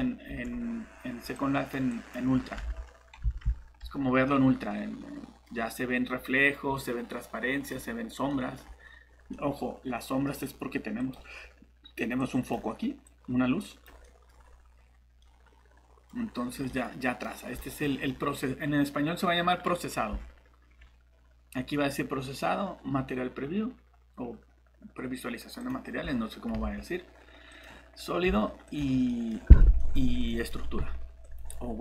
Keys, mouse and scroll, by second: 0.3 Tab, 1.3 click, 2.6 alt+Tab, 3.2 alt+Tab, 4.2 middle click, 8.6 scroll down 1, 9.3 middle click, 10.1 scroll up 1, 10.2 scroll down 1, 11.0 click, 14.0 middle click, 14.3 scroll up 1, 15.2 middle click, 16.1 scroll up 1, 16.7 middle click, 17.3 scroll down 1, 17.6 middle click, 20.1-21.5 typing, 25.6 click, 25.8-27.2 typing, 28.2-29.1 typing, 29.1 middle click, 30.0 scroll up 1, 30.3 middle click, 30.8-31.8 typing, 31.2 click.